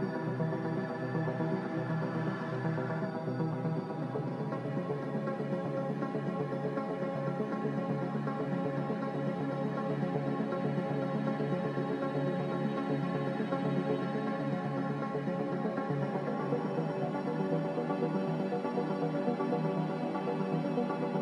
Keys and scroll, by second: 4.2 space, 16.6 a, 16.6 r, 20.1 a.